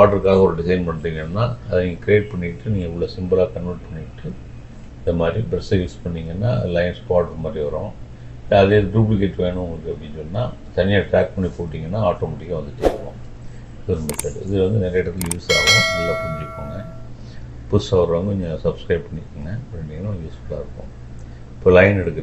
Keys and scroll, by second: 1.8 Delete.